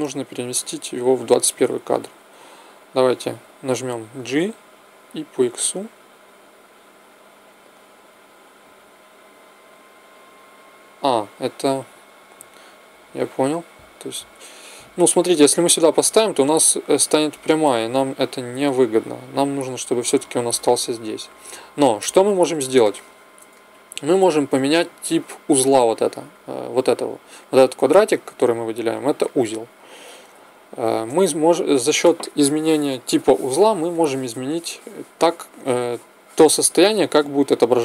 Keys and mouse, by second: 4.1 g, 18.6 ctrl+z, 29.0-35.5 middle drag.